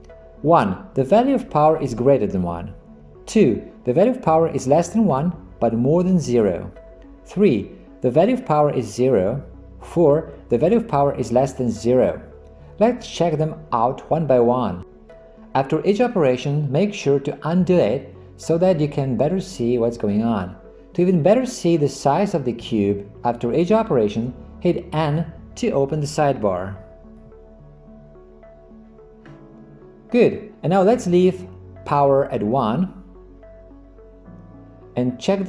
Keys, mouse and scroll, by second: 27.2 n.